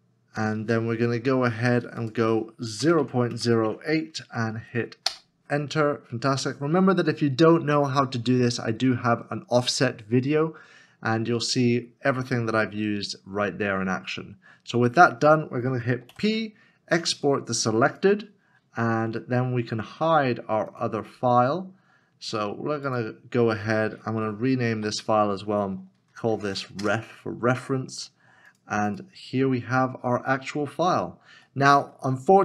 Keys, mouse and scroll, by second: 2.8 KP_0, 3.3 KP_Decimal, 5.0 Return, 16.1 p, 24.7 p, 25.9 F2, 26.1 typing, 26.8 Return, 30.2 Return, 30.4-30.8 scroll down 1, 30.8-31.3 scroll up 1, 31.5 shift+middle click.